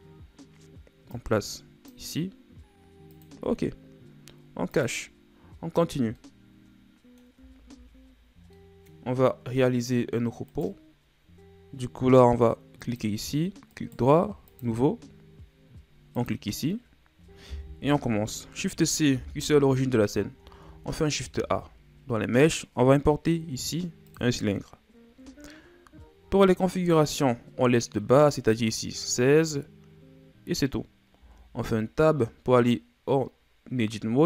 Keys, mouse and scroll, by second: 0.0-1.1 scroll down 4, 1.1 click, 3.2 click, 4.8 click, 12.9 click, 13.7 right click, 14.6-15.2 right drag, 15.2 scroll down 6, 16.2 click, 17.8 KP_1, 19.1 shift+c, 20.1-21.3 scroll down 6, 21.3 shift+a, 25.9-28.4 scroll down 1, 31.2 Tab, 32.1 scroll down 3.